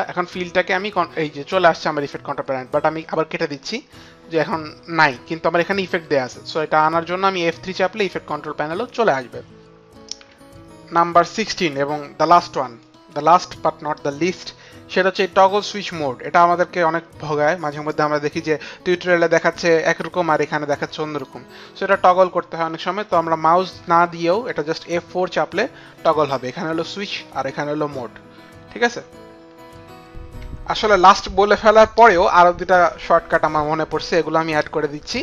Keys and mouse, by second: 3.0 click, 12.8 click, 16.6 click.